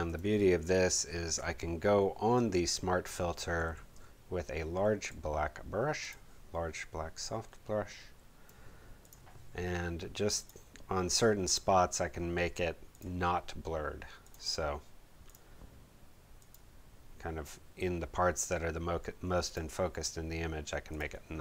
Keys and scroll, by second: 3.6 b.